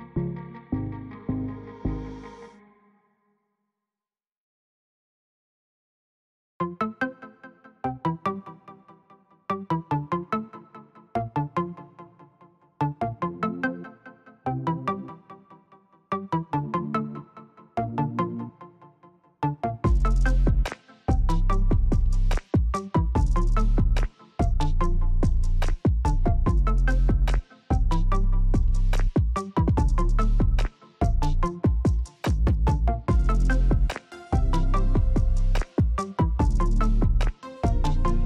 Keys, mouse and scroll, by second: 10.8 click, 15.0-38.2 alt+shift+drag.